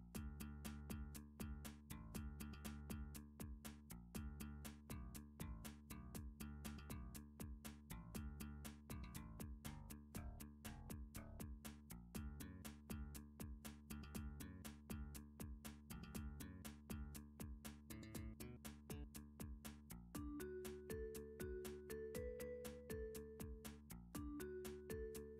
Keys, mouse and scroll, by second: 3.6 click, 7.1-8.9 drag, 9.1-11.5 middle drag, 11.0 7, 11.5-12.5 scroll up 4, 12.5 click, 13.8 g, 16.1 click, 16.6 click, 16.9 g, 18.3 click, 21.6 middle click, 22.1 7, 25.2 middle click.